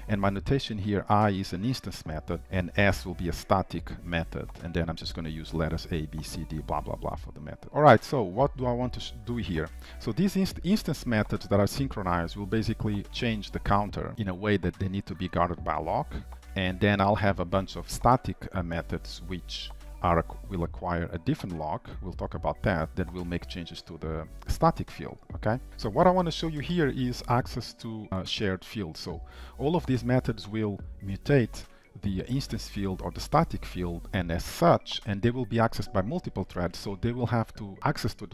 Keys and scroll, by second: 7.4 ctrl+s, 25.7 ctrl+s.